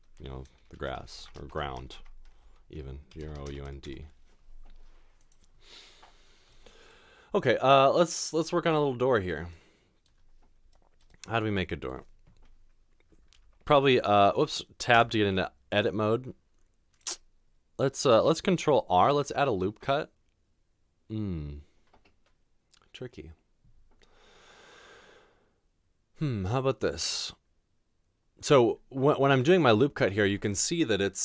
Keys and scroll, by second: 1.0-3.6 typing, 3.8 Return, 13.4 ctrl+r, 15.0 Tab, 19.0 ctrl+r.